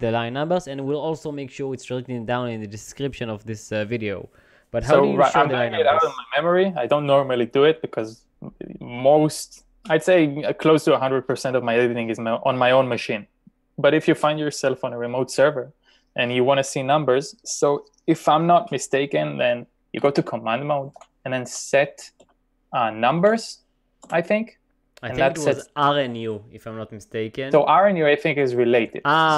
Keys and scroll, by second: 20.2-23.7 typing, 24.1 Return.